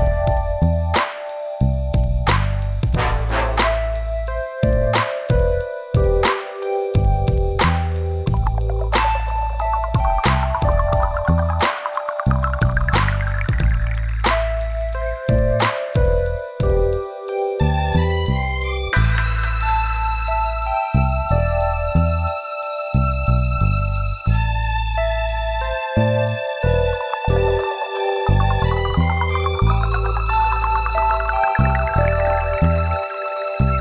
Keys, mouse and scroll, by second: 8.6 click, 9.7 click, 11.5 click, 12.4 click, 12.5 click, 13.2 click, 14.1 click, 14.9 click, 15.6 right click, 16.6 click, 17.5 click, 17.7 click, 18.5 click, 18.9 click, 18.9 double click, 19.6 double click, 20.0 scroll down 2, 21.0 click, 22.1 click, 23.6 alt+,, 24.5 scroll up 2, 25.5 click, 30.9 scroll down 2, 32.5 scroll up 2.